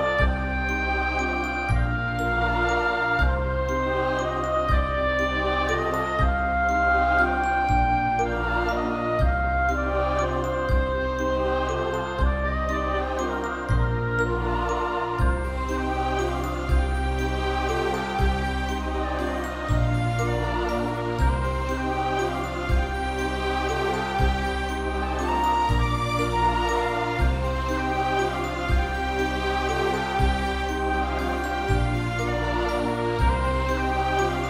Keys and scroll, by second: 0.4 x, 3.0 space, 12.2 0, 13.0 ctrl+0, 19.3 ctrl+v, 20.0 alt+BackSpace, 22.9 ctrl+=, 22.9 ctrl+=, 23.0 ctrl+=, 23.4 space, 24.5 b, 32.9 space, 33.3 ].